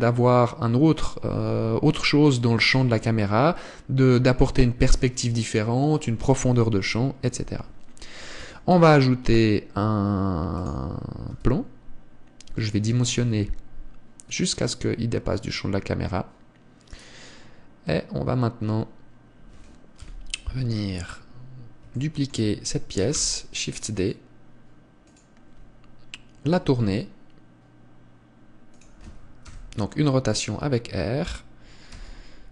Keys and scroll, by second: 8.9 shift+a, 11.8 s, 13.6 s, 20.5 KP_7, 23.6 shift+d, 27.0 r, 30.0 KP_0, 32.4 r.